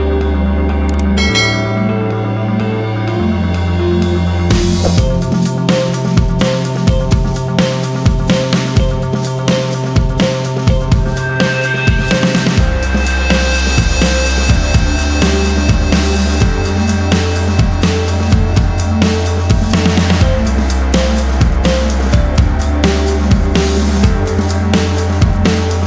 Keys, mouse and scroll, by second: 0.4 ctrl+r, 0.8-1.3 scroll down 1, 1.3 scroll up 1, 1.7 ctrl+click, 4.1 ctrl+r, 4.5-4.8 scroll down 1, 4.8 click, 5.3 ctrl+o, 8.1 click, 9.2 click, 15.1 F4, 19.0 click, 19.7 click, 20.5 click, 21.8 double click, 22.3 ctrl+click, 24.4 click, 24.5 c.